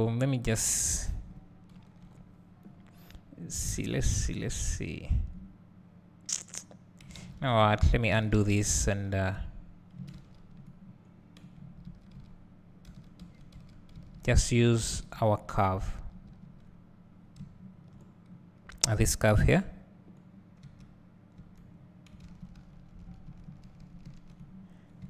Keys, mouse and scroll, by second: 0.5 click, 2.0 KP_7, 3.0 scroll up 1, 4.1 click, 7.5 ctrl+z, 8.2 ctrl+z, 10.2 ctrl+z, 13.4 ctrl+z, 14.1 ctrl+z, 14.7 ctrl+z, 16.4 ctrl+z, 17.2 scroll down 1, 17.4 `, 19.5 KP_7, 21.4 Tab, 22.3 ctrl+z, 22.6 ctrl+z, 22.8 ctrl+z, 23.1 ctrl+z.